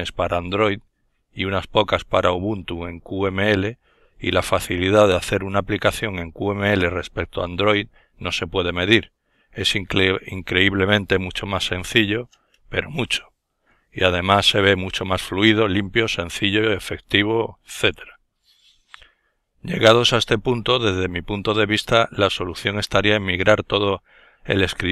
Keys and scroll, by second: 6.8 alt+F4.